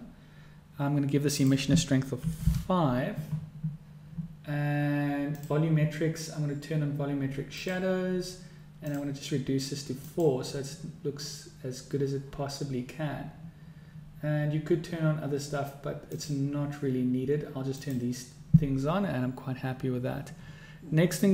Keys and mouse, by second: 1.7-3.6 drag, 5.6-10.6 drag, 18.3 click.